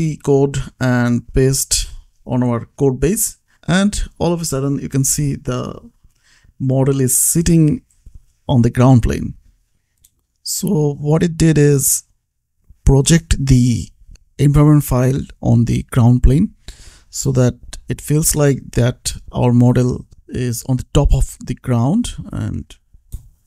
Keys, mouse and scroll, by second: 2.4 ctrl+c, 3.2 click, 4.1 ctrl+v, 4.9 ctrl+s, 6.2 click, 9.7-10.1 scroll down 1, 10.1-10.4 scroll up 1, 10.4 click, 12.5 click, 14.7 click, 19.1 click, 21.8 shift+Left, 22.5 Right, 22.9 shift+Left.